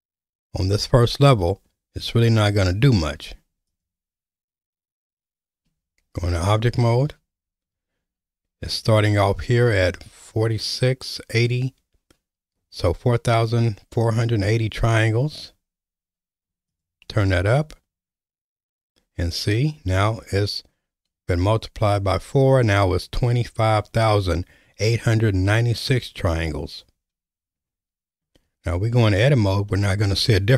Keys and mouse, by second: 3.7 click, 5.7 Tab, 16.8 click, 28.7 Tab.